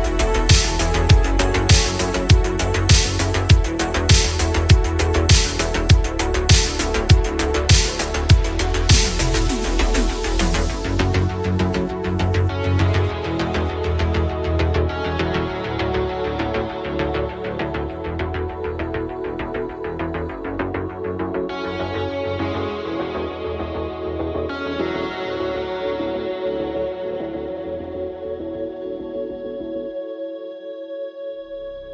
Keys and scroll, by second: 26.1 ctrl+z.